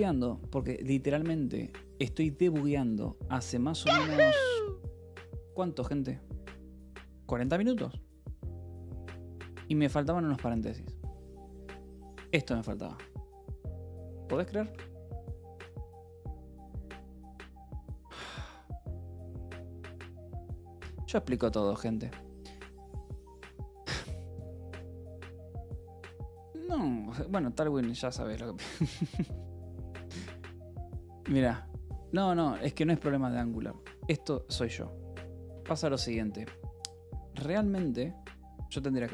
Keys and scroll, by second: 1.9 r, 3.3 Escape, 3.9 u, 4.4 Escape, 4.7 u, 7.9 Escape, 8.1 e, 8.9 a, 9.1 BackSpace, 10.1 Escape, 11.2 a, 12.4 Escape, 15.2 ctrl+s, 22.1 Escape, 22.2 k, 22.7 k, 23.4 j, 28.9 k, 29.7 k, 30.1 j, 33.2 j, 34.1 h, 35.3 l, 36.0 h, 37.7 k, 39.0-39.1 typing.